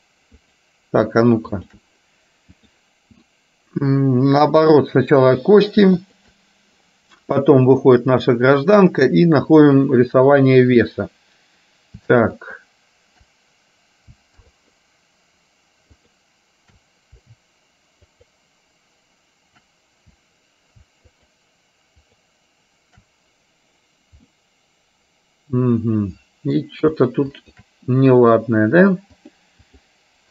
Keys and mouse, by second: 2.7-4.2 drag, 4.8 click, 6.2 shift+click, 7.8-10.2 drag, 12.5 shift+click, 14.5 alt+shift+click, 18.3 alt+shift+click, 21.3 shift+click, 22.2 shift+click, 24.3-26.5 middle drag, 27.5 shift+click, 29.3 click.